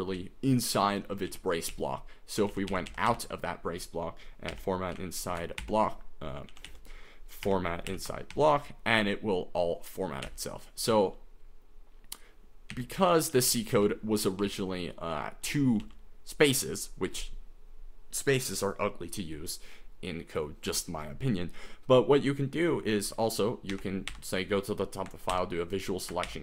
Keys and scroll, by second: 0.0-8.8 typing, 10.4-11.0 typing, 12.8-15.8 typing, 23.7 g, 24.1 g, 25.3 shift+v, 26.3 shift+g.